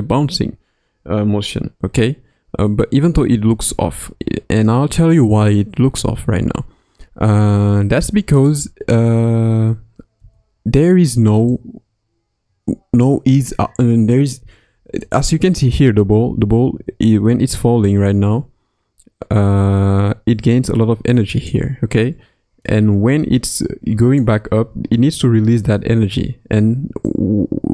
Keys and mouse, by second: 10.2 space, 11.5-14.1 drag, 15.1-15.6 drag, 15.6 space, 15.9 space, 17.6-21.5 drag, 22.6-24.2 drag, 27.0-27.7 drag.